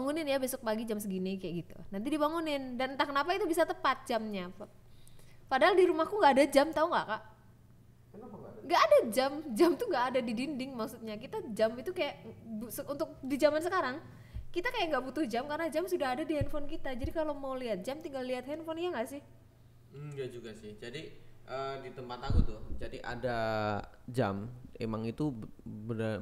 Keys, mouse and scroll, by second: 10.8 click, 12.1 KP_1, 13.5 ctrl+s.